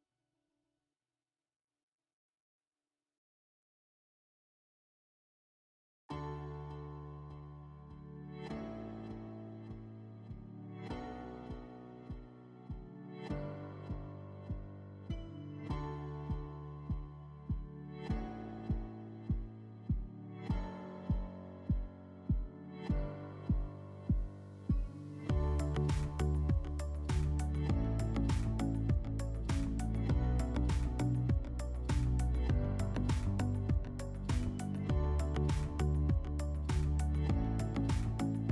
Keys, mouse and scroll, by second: 0.1 F4, 1.8 alt+w, 3.8 click, 4.1 alt+w, 5.8-7.4 middle drag, 8.0-8.9 drag, 9.9 alt+w, 14.4 alt+w, 16.2 middle click, 19.3 click, 20.5 click, 23.2 click, 25.3 alt+middle click, 26.3 click, 27.1 middle click, 27.6 scroll, 28.2 ctrl+click, 30.1 ctrl+click, 34.0 shift+click, 35.7 alt+middle click.